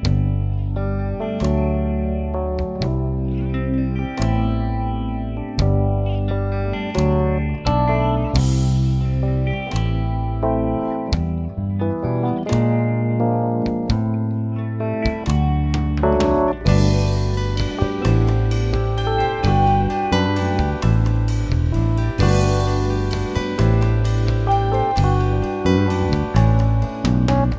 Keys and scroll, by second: 0.0-0.6 typing, 1.3 ctrl+space, 6.1-7.4 typing, 8.6 e, 9.6 Return.